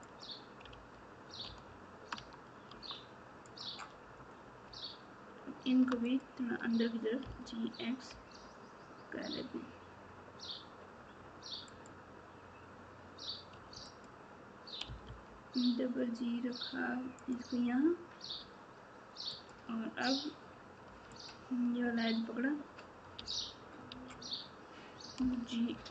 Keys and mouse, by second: 0.7 alt+z, 2.1 Tab, 6.1 shift+click, 13.8 click, 19.3 click, 21.1 click.